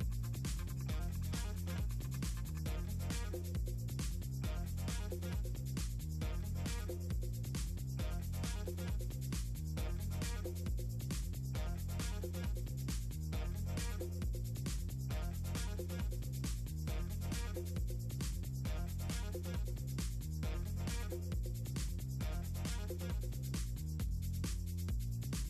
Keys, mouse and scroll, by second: 0.0 ctrl+scroll down 2, 1.4 click, 2.3 click, 3.8 click, 5.5-6.9 drag, 7.8 click, 8.0 click, 8.9 scroll up 2, 9.1 click, 10.4 click, 11.8 click, 12.2 click, 13.1 click, 13.9 click, 15.1 click, 16.3 click, 17.7 click, 19.6 click, 20.2 click, 21.4 click, 23.0 click, 24.1 click, 24.9 click.